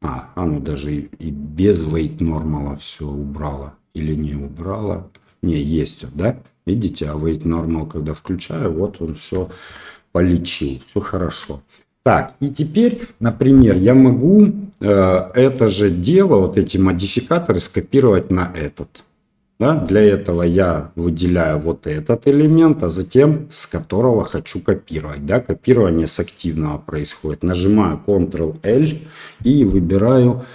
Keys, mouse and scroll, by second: 0.0-0.7 middle drag, 2.4-4.6 drag, 5.4 middle click, 7.5 click, 8.8-9.2 middle drag, 9.4 shift+middle drag, 9.9-10.8 middle drag, 11.1 shift+middle drag, 11.5 middle drag, 12.5-12.9 middle drag, 14.0-14.7 middle drag, 15.2 click, 16.0 middle drag, 16.6 click, 17.5 click, 19.5 middle drag, 21.9-22.2 middle drag, 22.5-22.8 shift+middle drag, 23.8 shift+click, 28.6 ctrl+l.